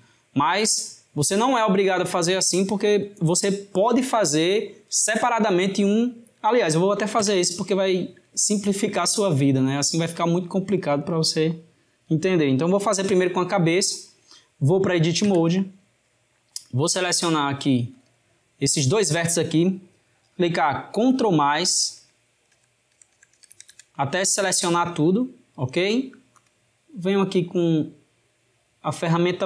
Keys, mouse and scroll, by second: 7.3 Tab, 8.5-10.9 shift+middle drag, 10.9 drag, 15.2 Tab, 17.2 click, 18.0 shift+click, 21.2 ctrl+KP_Add, 26.5-29.2 drag.